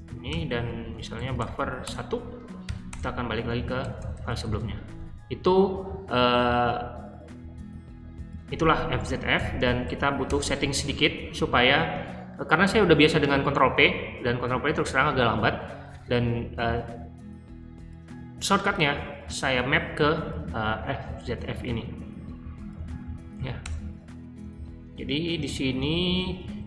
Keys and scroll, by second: 0.2-4.5 typing, 9.3-10.3 typing, 23.6 shift+Return, 25.3-26.6 typing.